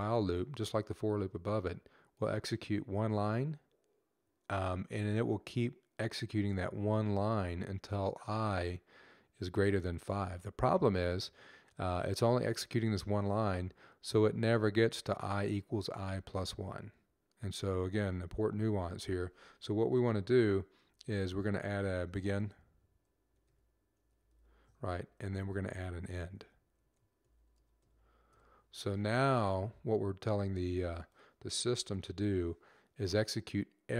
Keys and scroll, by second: 20.0 Up, 20.6 shift+b, 23.5-28.1 typing.